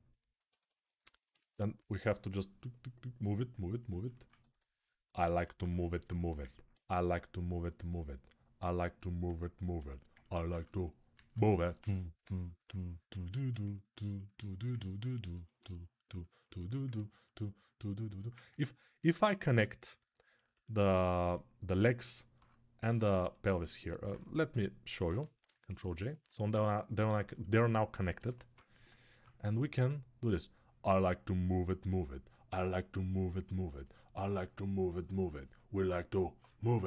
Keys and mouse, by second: 5.3 alt+q, 9.4-12.2 alt+shift+drag, 11.0 alt+q, 12.2-16.2 ctrl+alt+right drag, 16.2-18.3 alt+drag, 18.3-19.8 alt+right drag, 19.4 ctrl+Tab, 19.8 middle click, 20.3 shift+right click, 20.3-31.9 shift+middle drag, 25.6 ctrl+j, 26.0 ctrl+Tab, 27.9 g, 28.3 ], 28.8 ], 29.1-36.8 drag.